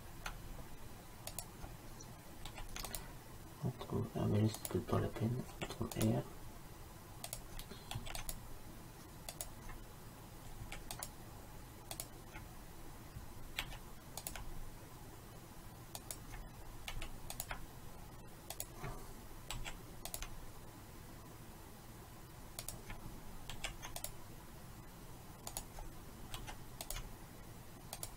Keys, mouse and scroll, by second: 2.6 ctrl+r, 5.6 ctrl+r, 8.0 ctrl+r, 10.6 ctrl+r, 13.7 ctrl+r, 17.0 ctrl+r, 19.6 ctrl+r, 23.6 ctrl+r, 26.5 ctrl+r.